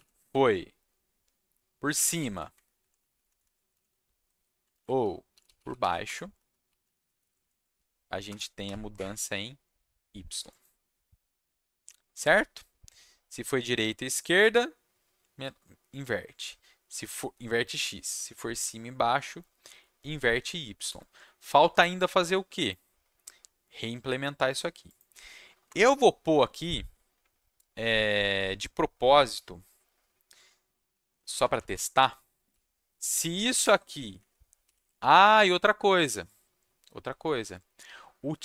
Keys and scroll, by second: 0.6 alt+Left, 1.5-2.6 typing, 2.8 Down, 3.0 Right, 3.1 Right, 3.2 Right, 3.4 Right, 4.7 ctrl+shift+Left, 5.0-6.2 typing, 6.3 Down, 6.8 Left, 6.9 Left, 7.1 Left, 7.2 Left, 7.4 Left, 7.5 Left, 7.6 Left, 8.2 BackSpace, 8.6 y, 8.9 Escape, 20.3 ctrl+shift+s, 25.6 Return, 30.8 shift+Down, 31.0 shift+Right, 31.1 shift+Right, 31.2 shift+Right, 31.4 shift+Right, 31.5 shift+Right, 31.7 shift+Right, 32.2-33.6 typing.